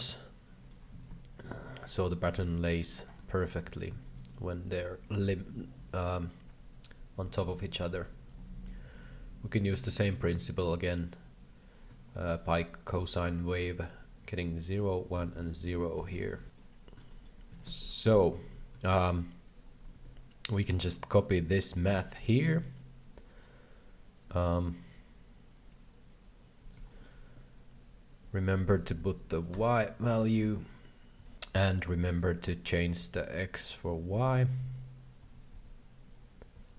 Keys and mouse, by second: 0.9 KP_3, 1.1 KP_5, 1.7 shift+middle click, 2.6 shift+middle click, 3.4 shift+middle click, 4.0 shift+middle click, 4.2 middle click, 5.9 KP_7, 7.1 KP_3, 9.5 click, 11.3 click, 12.1 shift+middle click, 15.4 click, 15.9 z, 16.5 middle click, 17.1 shift+middle click, 17.5 KP_3, 17.6 KP_5, 17.6 KP_5, 19.0 shift+middle click, 20.0 alt+a, 20.6 right drag, 21.8 shift+middle click, 22.4 shift+d, 23.3 right click, 24.4 alt+click, 25.5 alt+click, 26.2 alt+click, 27.0 middle click, 28.4-31.2 drag, 31.2 ctrl+z, 32.6 ctrl+alt+a, 33.0 ctrl+c, 34.1 ctrl+v, 34.6 ctrl+v, 35.4 ctrl+v, 35.5 ctrl+v.